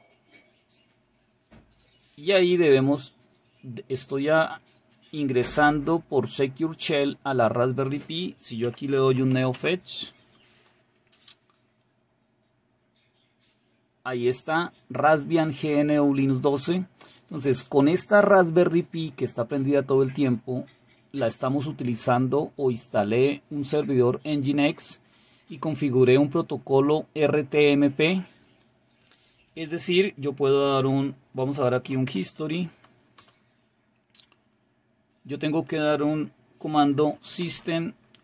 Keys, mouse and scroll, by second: 8.7 typing, 31.6 typing, 36.8 typing.